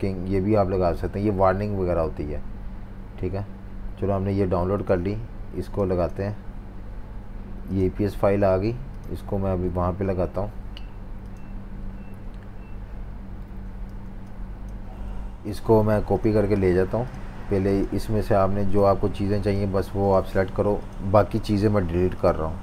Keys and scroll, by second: 13.9 typing.